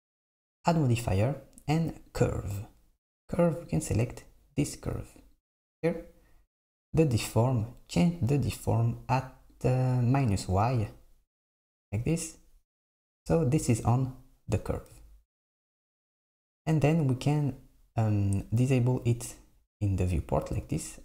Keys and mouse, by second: 2.2-3.5 drag, 3.8 click, 7.6-10.6 drag, 19.3 click.